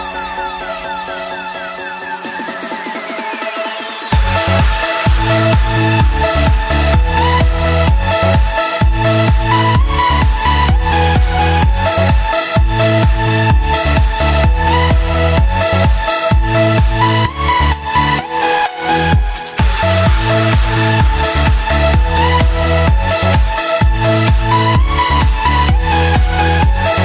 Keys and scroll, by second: 3.1 F6, 6.4 alt+BackSpace, 7.5 F7, 14.8 ctrl+s.